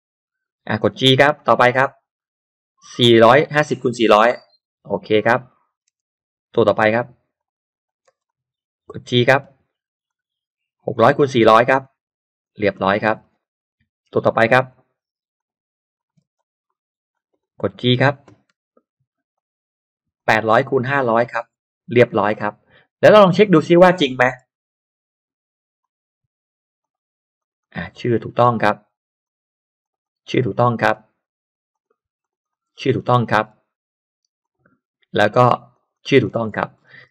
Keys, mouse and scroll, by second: 1.2 g, 2.2 click, 3.0 click, 4.2 click, 4.8 click, 5.2 middle click, 5.7 middle click, 5.9 l, 7.4 click, 7.8 click, 8.1 space, 8.2 click, 9.5 g, 10.0 click, 10.9 click, 11.8 click, 12.4 click, 12.6-13.0 scroll down 1, 13.0 scroll up 1, 13.1 middle click, 14.0 l, 14.7 click, 15.4 click, 16.0 click, 16.2 space, 16.4 click, 17.1 click, 18.5 g, 19.3 click, 20.2-21.2 drag, 21.6 click, 22.0 middle click, 22.2-22.6 scroll down 1, 23.2 click, 23.7-24.3 scroll up 1, 24.3 middle click, 24.5 middle click, 25.8 click, 26.8 click, 27.4 click, 27.8-28.2 scroll down 2, 28.4-28.7 scroll up 2, 29.2 click, 29.8 click, 30.0 click, 30.2-30.6 scroll down 2, 30.8-31.2 scroll up 1, 31.7 click, 32.2 click, 32.6-33.0 scroll down 1, 33.2-34.1 scroll up 2, 34.4 click, 35.7 click, 36.2-36.6 scroll down 1, 36.5 space, 36.7-37.1 scroll up 2.